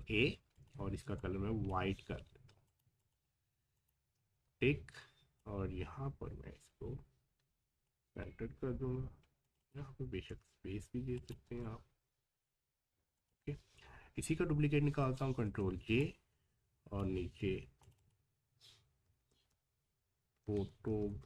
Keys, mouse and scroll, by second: 0.6-2.6 drag, 4.4 v, 5.4-9.4 drag, 11.4 space, 13.2 click, 15.2 ctrl+j, 16.0-17.8 drag, 19.0 typing.